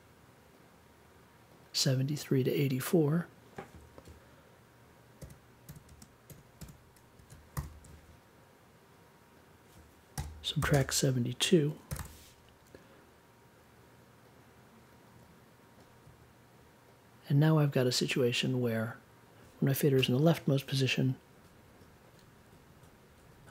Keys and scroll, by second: 5.2 7, 5.8 space, 6.2 8, 7.2 super+k, 7.5 super+j, 10.1-12.4 typing.